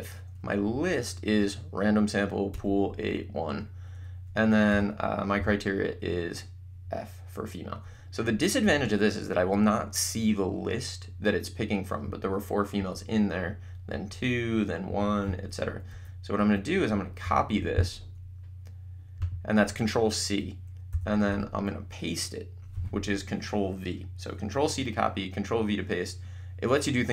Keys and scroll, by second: 0.6 Up, 2.5 Return, 4.7 ,, 5.3 f, 8.6 Return, 15.9 Up, 17.6 c, 20.9 =, 21.7 v.